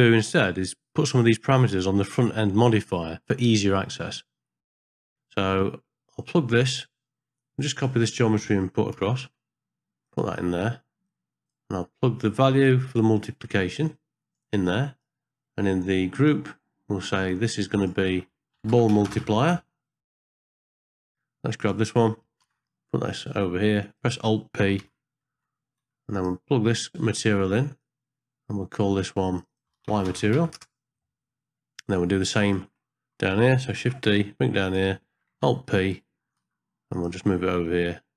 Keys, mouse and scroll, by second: 0.7 middle click, 1.0 scroll up 1, 1.8 middle click, 2.2 scroll up 1, 3.0 ctrl+space, 3.7 middle click, 4.6 middle click, 4.9 middle click, 5.5 middle click, 7.8 click, 8.9 shift+d, 11.0 click, 11.3 click, 12.7-14.3 drag, 14.6 click, 16.1 click, 17.6 click, 17.8-20.1 drag, 20.4 middle click, 21.6 click, 22.5 shift+d, 24.9 alt+p, 25.8 g, 27.8 click, 29.3 click, 29.5-30.6 drag, 33.8 shift+d, 35.5 alt+p, 36.4 g.